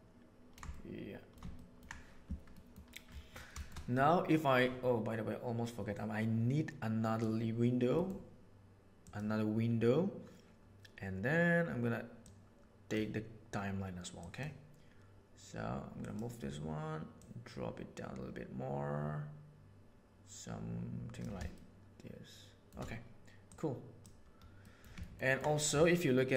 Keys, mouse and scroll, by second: 0.6 shift+middle click, 1.5 ctrl+middle click, 2.5 middle click, 3.5 shift+middle click, 5.9-7.2 right drag, 7.9 middle click, 8.9-10.5 right drag, 10.5-13.0 drag, 14.1 click, 15.9 click, 17.1-19.4 drag, 19.4-21.2 middle drag, 21.5-22.5 shift+middle drag, 23.5 right click, 24.7 middle click, 25.1 ctrl+middle click.